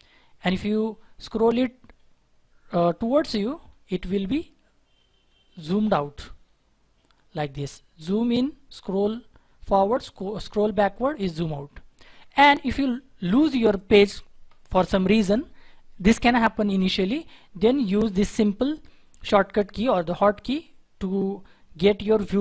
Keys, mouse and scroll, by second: 3.2-4.2 scroll down 1, 6.2 scroll down 1, 6.2-8.6 scroll up 1, 8.6-9.5 scroll down 1, 11.4 scroll down 1, 11.4-12.1 scroll up 1, 12.1-12.7 scroll down 1, 12.7 scroll down 1, 12.7-14.9 scroll up 1.